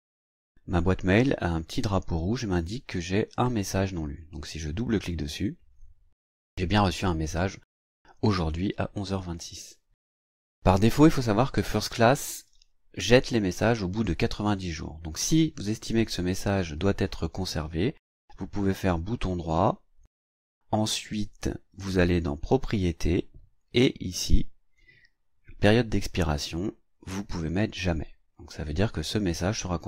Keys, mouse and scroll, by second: 4.9 click, 18.4 right click, 22.6 click, 24.2 click, 26.3 click.